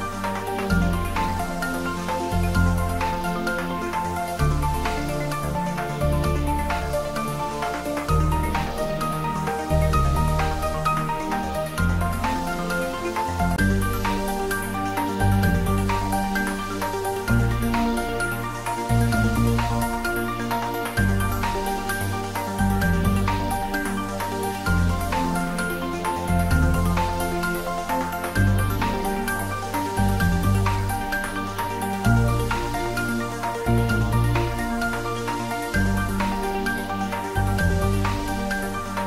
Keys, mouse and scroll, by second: 3.5 click, 9.0 click, 10.9 scroll up 1, 14.5 click, 16.7-20.9 drag, 21.4 Tab, 22.8-23.8 scroll up 1, 23.8-24.3 middle drag, 25.3 click, 27.0 Tab, 27.5 click, 31.2-32.1 middle drag, 33.0 shift+click, 33.5-35.4 middle drag, 36.7-39.0 drag.